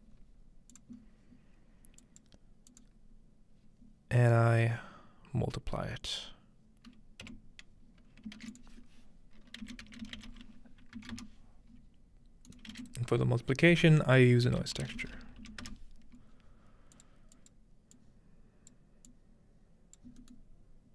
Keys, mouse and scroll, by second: 0.7 drag, 1.0 scroll up 1, 2.0 click, 2.7 click, 7.2 m, 8.4 shift+a, 8.5 shift+click, 9.6-11.5 typing, 12.5 click, 12.7 shift+a, 12.8-14.5 shift+drag, 14.5-15.9 typing, 16.9 click, 17.5 click, 18.7-19.1 drag, 20.0-20.9 drag.